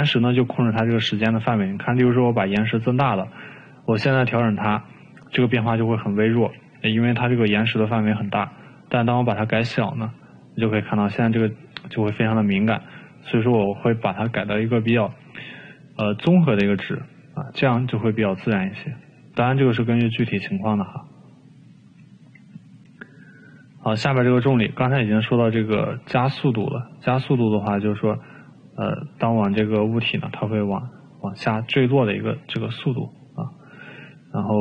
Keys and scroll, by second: 9.8 1, 15.6 6, 20.7 2.